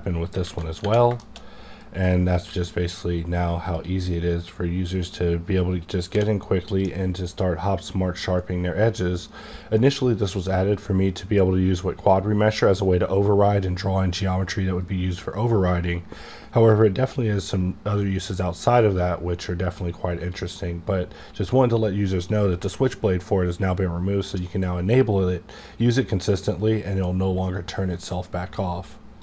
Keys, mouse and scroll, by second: 0.4 alt+a, 0.7 Tab, 1.2 middle click, 1.7-6.1 drag, 6.1 d.